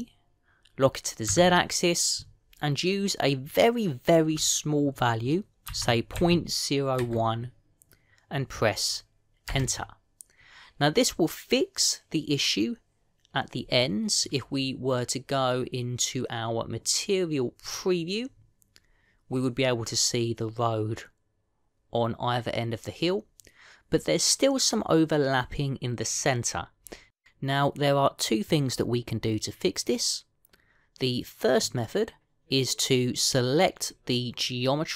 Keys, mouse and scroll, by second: 0.5 g, 14.7 middle click, 15.2-16.4 scroll up 1, 18.6 click, 20.0-21.5 scroll down 1, 32.4 click.